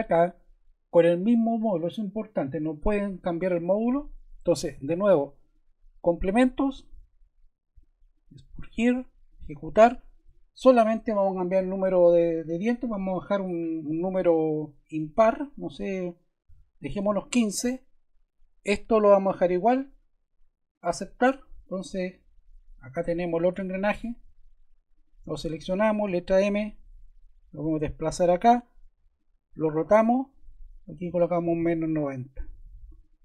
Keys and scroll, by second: 16.6-17.5 typing, 26.0 m, 31.0-32.0 typing.